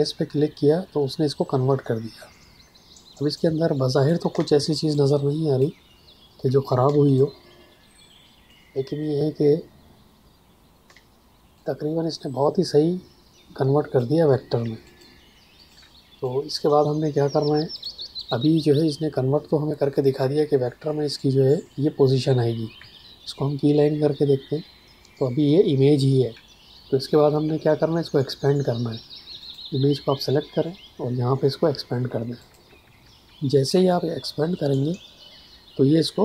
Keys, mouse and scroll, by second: 3.3 click, 4.3 space, 4.9 ctrl+click, 6.8 space, 7.1 click, 7.3 space, 11.5 click, 11.6 space, 14.8 ctrl+alt+click, 15.5 ctrl+alt+click, 16.2 click, 22.7 ctrl+Num_Lock, 29.3 click, 32.3 click.